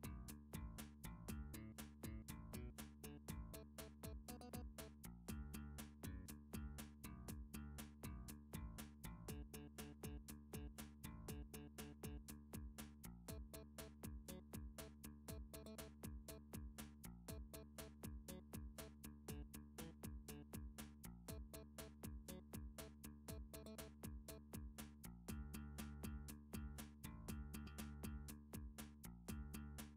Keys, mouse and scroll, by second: 1.9 f, 2.8 middle click, 5.7 ctrl+r, 6.4 click, 7.2 click, 9.5 middle click, 10.9 middle click, 11.7 g, 13.4 click, 15.0 middle click, 15.6 click, 16.3 ctrl+r, 17.0 click, 19.4 right click, 20.4 ctrl+z, 21.4 ctrl+r, 21.7 middle click, 21.8 middle click, 22.1 middle click, 22.5 click, 22.7 click, 23.2 ctrl+r, 24.4 click, 24.6 click, 25.5 middle click, 26.0 click, 26.7 middle click, 27.2 shift+click, 27.3 shift+click.